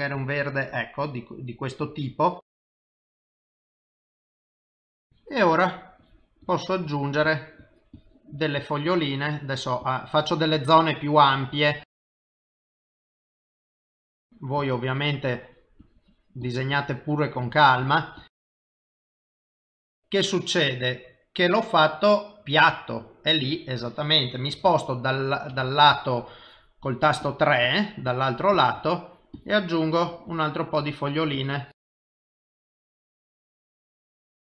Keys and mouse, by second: 2.6 click, 3.3 click, 4.9 click, 5.1 click, 6.0 click, 6.4 click, 7.3 click, 7.6 click, 8.4 click, 8.9 click, 11.4 click, 11.7 click, 12.0 click, 12.2-12.7 click, 12.6 click, 13.0 click, 13.2 click, 13.7 click, 13.8 click, 14.2 click, 15.2 click, 16.8 click, 17.2 click, 17.4 click, 17.8 click, 18.2 click, 18.7 click, 19.1 click, 19.3 click, 19.9 click, 20.6 middle click, 23.6 middle click, 24.6 KP_1, 25.5 KP_3, 26.4 click, 26.8 click, 27.6 click, 28.8 click, 29.4 click, 30.0 click, 30.3-31.9 click, 31.8 click, 32.2 click, 32.3-32.9 click, 32.7 click, 33.1 click, 33.5-34.5 click, 33.6 click.